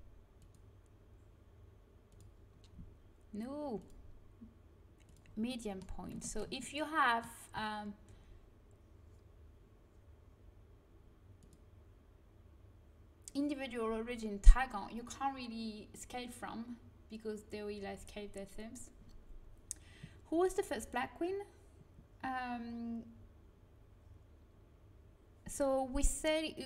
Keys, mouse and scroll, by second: 0.3-2.1 drag, 3.7-5.4 drag, 5.4 middle click, 5.7 right click, 6.1-8.6 middle drag, 11.3-14.8 drag.